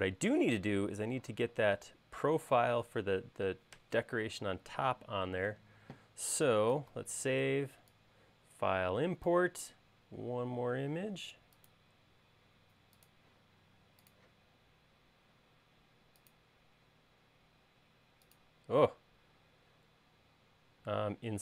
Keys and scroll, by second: 7.4 super+s.